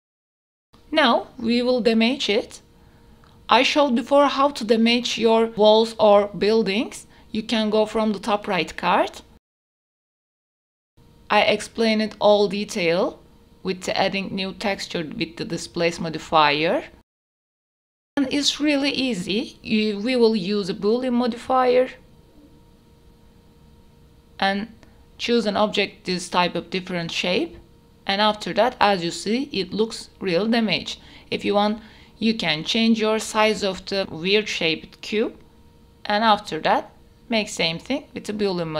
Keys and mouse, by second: 0.0 shift+a, 3.3 ctrl+3, 4.4 ctrl+a, 5.3 click, 6.2-7.2 drag, 7.6 click, 8.6 click, 10.1 click, 10.8 middle click, 12.5-15.5 middle drag, 15.7 click, 15.7 middle click, 15.7 right click, 15.8 click, 16.5 KP_7, 17.1 g, 17.9 r, 19.1-20.1 middle drag, 20.3 middle drag, 21.3 middle click, 23.3-24.2 drag, 25.1 click, 26.8 ctrl+a, 27.5 click, 27.8 h, 28.0 middle click, 30.5 s, 30.5 x, 31.3-31.9 drag, 32.9 drag, 33.5-34.3 drag, 35.1 click, 36.6 shift+a, 37.8 ctrl+a, 38.3 click.